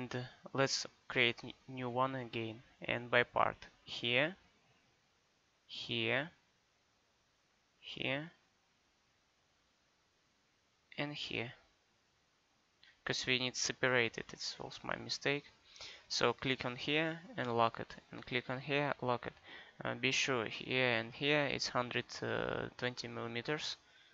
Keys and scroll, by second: 14.2 Escape.